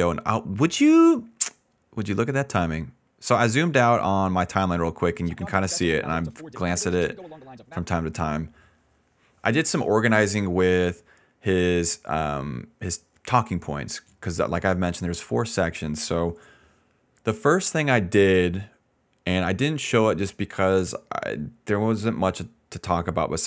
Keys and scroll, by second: 0.0-2.4 typing, 3.4 d, 4.8 s, 5.1 space, 5.6 d, 6.8 s, 7.7 space.